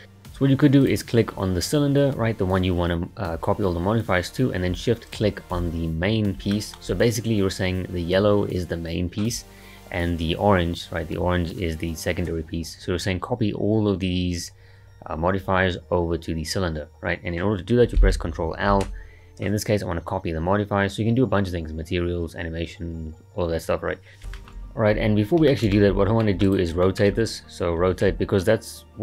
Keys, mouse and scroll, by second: 0.8 click, 5.1 shift+click, 6.5-7.1 shift+middle drag, 7.1-9.4 scroll up 1, 18.7 ctrl+l, 23.9 ctrl+z, 24.2 click, 24.3-24.9 shift+middle drag, 24.9-25.5 scroll up 4, 25.5-26.4 shift+middle drag, 26.4 click, 26.8-27.8 shift+middle drag, 27.8 r.